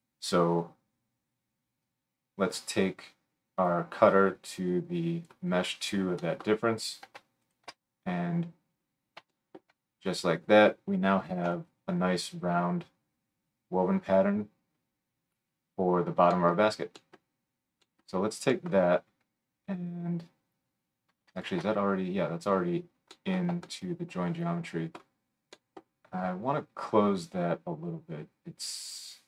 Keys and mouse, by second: 7.5 alt+shift+middle click, 11.4 KP_7, 16.6-18.7 right drag, 18.7 middle click, 19.1 right click, 19.2-20.5 middle drag, 20.5-29.2 right drag.